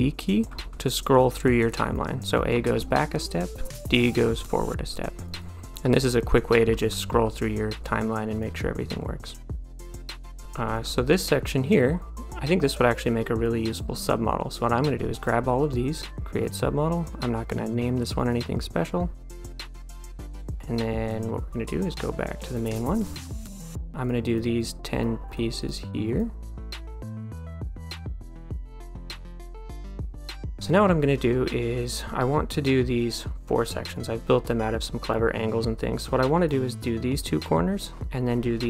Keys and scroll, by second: 0.5 d, 2.6 a, 4.1 d, 5.8 a, 6.7 d, 7.3 a, 11.4 d.